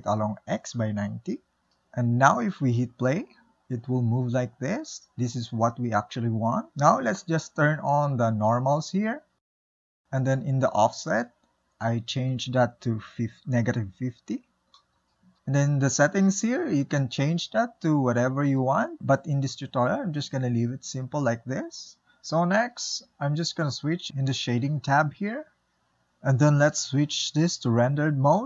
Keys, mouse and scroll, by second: 0.8 r, 2.7 space, 4.2-7.5 middle drag, 7.5 click, 9.6 space, 10.6 space, 12.9-15.2 drag, 17.2-19.6 drag, 19.6 ctrl+z, 24.6 click, 25.9 n.